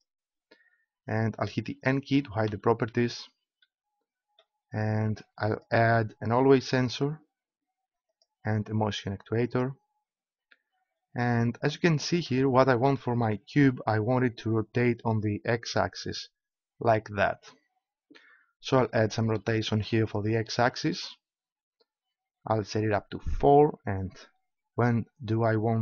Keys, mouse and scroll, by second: 0.0 right click, 2.4 n, 5.5-7.2 drag, 8.0-9.9 drag, 12.9-14.2 middle drag, 19.4-22.2 drag.